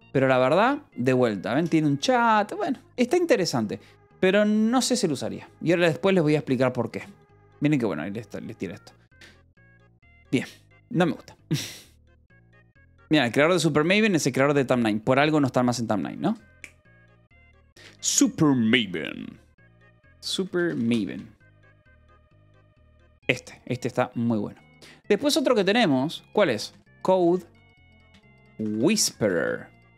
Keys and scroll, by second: 0.0-0.4 typing, 4.7 k, 6.2 j, 19.7-23.1 typing, 25.7 ctrl+l, 26.4-29.4 typing.